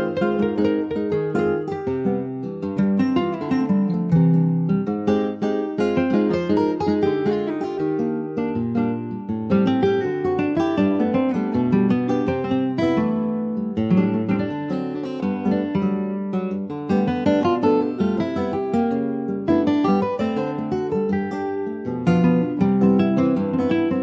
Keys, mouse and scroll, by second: 0.2 ctrl+s, 0.4 click, 0.9 Tab, 1.2 click, 1.6 scroll up 1, 2.1 click, 3.6 click, 4.1 Tab, 4.5 middle click, 5.0 ctrl+s, 5.3 click, 5.7 Tab, 6.2 click, 8.0 p, 9.9 click, 10.3 ctrl+s, 10.6 click, 11.1 scroll up 2, 11.4-12.4 middle drag, 12.4 a, 13.7 Tab, 15.4 click, 16.5 a, 16.8-19.5 right drag, 19.5 ctrl+s, 19.7 click, 20.3 click, 22.0-23.3 middle drag, 23.3 click.